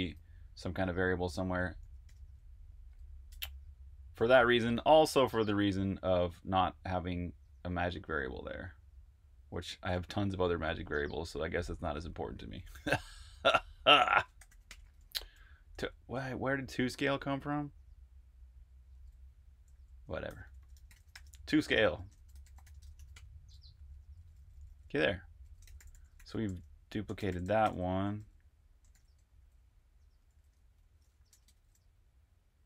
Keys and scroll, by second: 0.0-2.2 typing, 3.2 f, 4.2 BackSpace, 12.3-15.7 typing, 18.7-22.8 typing, 23.9-31.7 typing.